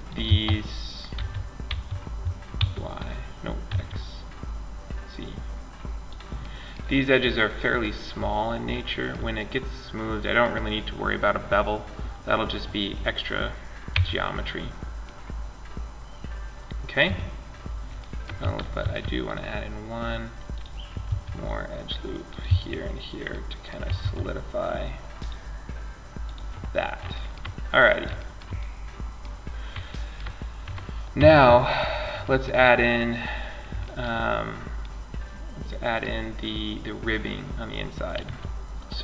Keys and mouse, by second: 0.4 s, 4.2-5.7 middle drag, 5.8-8.4 middle drag, 9.0 middle click, 12.9 middle click, 13.2 Tab, 16.2 Tab, 18.0 ctrl+r, 20.3 ctrl+r, 22.2 middle click, 23.2 ctrl+r, 25.6 click, 30.4 Tab, 36.2-37.4 middle drag, 37.4 a, 38.9 shift+a.